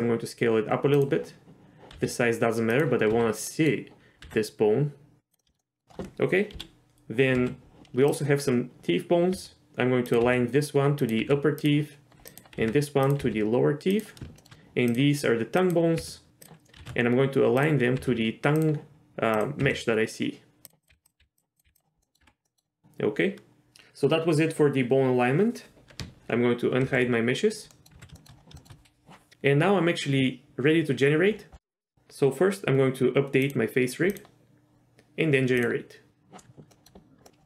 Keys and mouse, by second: 1.9 s, 3.1 z, 3.5 middle click, 4.2 s, 5.4 middle click, 5.5 shift+middle click, 5.6 middle click, 6.5 KP_3, 7.3 z, 9.3 r, 10.2 g, 11.2 r, 12.6 r, 13.2 g, 14.4 shift+middle click, 14.9 click, 15.7 click, 16.0 g, 16.6 g, 16.8 ctrl+z, 18.0 g, 19.3 click, 19.6 g, 20.8 click, 20.9 g, 21.2 g, 21.6 g, 22.0 middle click, 22.2 Tab, 22.5 middle click, 26.9 alt+h, 27.7 middle click, 27.9 z, 28.1 shift+middle drag, 28.6 shift+middle click, 33.4 click, 35.6 click, 36.7 click.